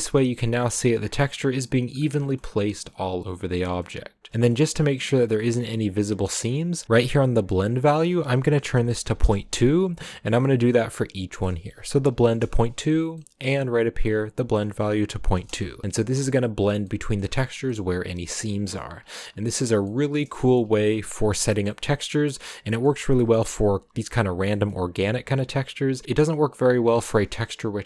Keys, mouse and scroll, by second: 0.9-1.2 scroll up 5, 1.2 middle click, 1.9-2.6 scroll down 4, 2.2 shift+middle click, 2.7-3.8 middle drag, 3.8-5.0 scroll up 6, 4.3 shift+middle click, 5.0 scroll up 1, 5.2-9.2 middle drag, 9.2-16.1 drag, 16.1-16.8 scroll down 4, 16.8 middle click, 17.5 scroll down 1, 17.6-18.9 middle drag, 18.9-19.4 scroll down 1, 19.5-21.5 middle drag, 21.5 scroll down 3, 21.6-26.0 middle drag, 26.0-27.8 scroll up 2.